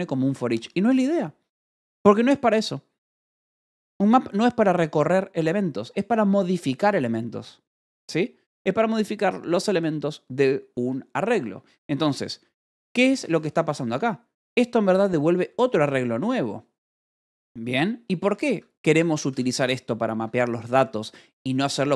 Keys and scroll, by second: 12.0 Escape, 12.3-13.8 typing, 15.4 u, 18.1 d, 18.4 Escape, 19.7 shift+v, 20.1 Escape, 20.7 j.